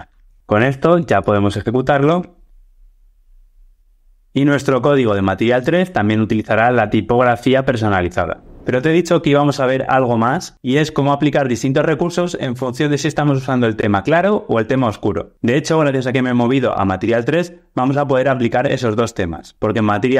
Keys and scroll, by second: 0.1 alt+super+l, 1.2 ctrl+r.